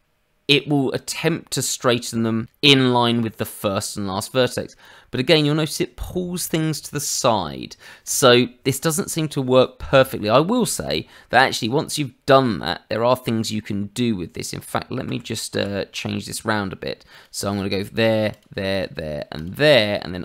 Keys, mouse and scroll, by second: 10.8 click, 12.3-13.6 scroll up 2, 13.6-13.9 scroll up 1, 14.1-14.6 scroll down 2, 15.0 ctrl+z, 15.5 ctrl+z, 17.1 click, 18.3 shift+click, 18.7 click, 19.3 shift+click.